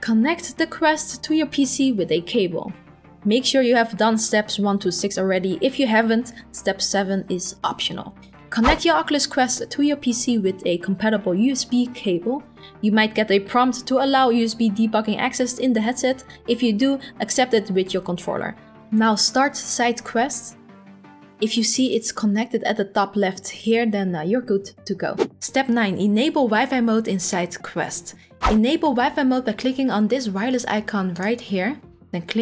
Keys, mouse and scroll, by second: 18.9 click, 19.1 click, 22.7 click.